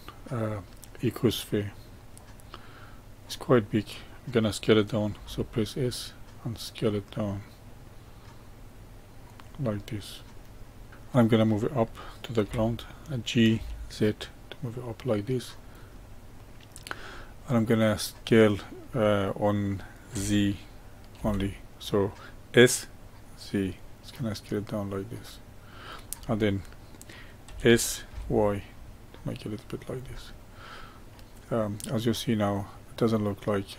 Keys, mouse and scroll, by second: 2.1-5.1 middle drag, 5.1 s, 9.7-10.6 middle drag, 10.6 scroll up 2, 10.9-12.4 middle drag, 12.4 g, 15.9-17.4 middle drag, 17.4 scroll up 1, 18.1-20.1 middle drag, 20.1 s, 27.4 s, 30.2-33.2 middle drag.